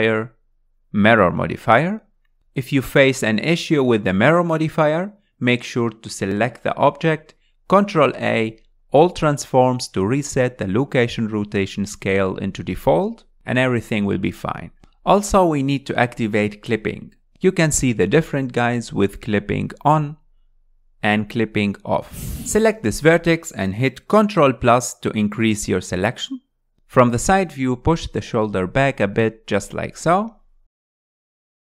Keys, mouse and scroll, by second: 1.0-5.6 drag, 5.6 alt+z, 6.8-7.4 scroll up 2, 7.8 Tab, 10.8 ctrl+a, 13.1 ctrl+a, 17.6-18.9 drag, 18.9 Tab, 19.7 click, 20.8 click, 22.0 g, 22.2 middle click, 22.4 click, 23.3 click, 23.7-24.2 scroll up 2, 26.0 ctrl+KP_Add, 27.3-29.5 middle drag, 29.5 KP_1, 31.6 click.